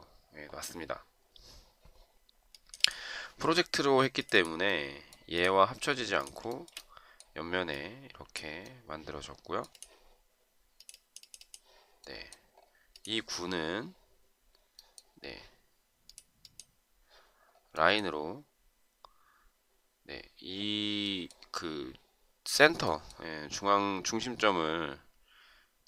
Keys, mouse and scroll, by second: 6.5 shift+right click.